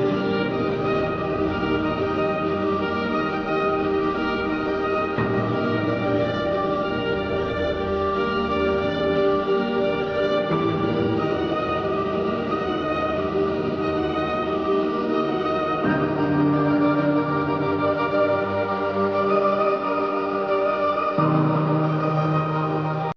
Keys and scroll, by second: 3.0 space, 4.1 ctrl+z, 4.9 ctrl+z, 6.6 space, 7.2 space, 7.9 ctrl+z, 8.6 ctrl+z, 9.2 space, 10.2 space, 11.5-12.0 typing, 13.3-13.7 typing, 14.3 ctrl+KP_Subtract.